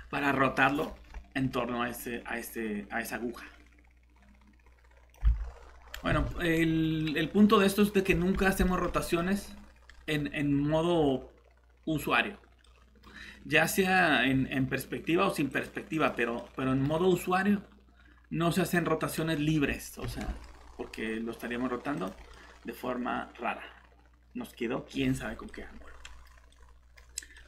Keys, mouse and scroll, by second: 5.3 alt+Tab, 6.1 Escape, 7.0 middle click, 8.4 scroll up 1, 8.7 middle click, 13.8 click, 16.4 middle click, 19.1 scroll up 1, 20.0 shift+r, 22.0 click, 22.3 middle click.